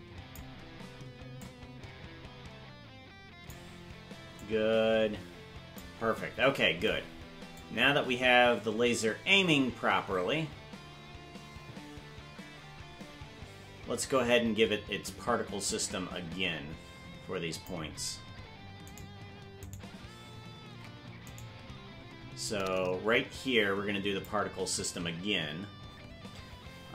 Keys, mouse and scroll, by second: 1.4-3.6 drag, 4.4-5.8 drag, 7.6-17.7 drag, 19.0 right click, 19.6 right click, 20.8 ctrl+Tab, 21.4 right click, 22.5-24.3 drag.